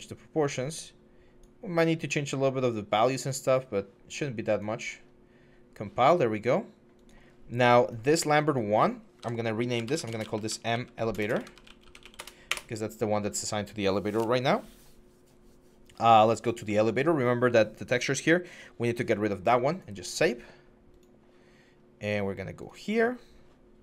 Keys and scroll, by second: 9.0 F2, 9.7-12.0 typing, 12.0 Return, 12.3 Return.